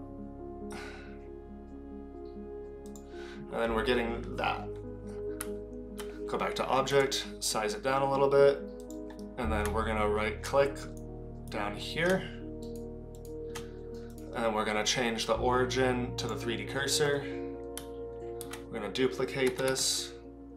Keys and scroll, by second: 5.4 Tab, 6.9 s, 8.8 s, 18.4 alt+d.